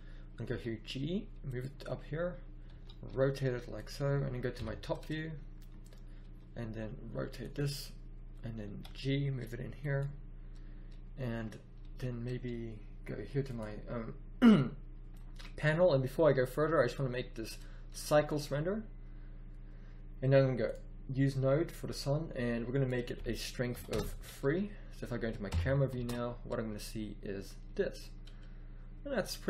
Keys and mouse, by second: 0.4 g, 2.6 r, 4.5 KP_7, 6.1 r, 8.6 g, 19.2-20.6 middle drag, 22.5-24.3 middle drag, 25.2 middle click, 25.4 KP_0, 25.9 shift+z.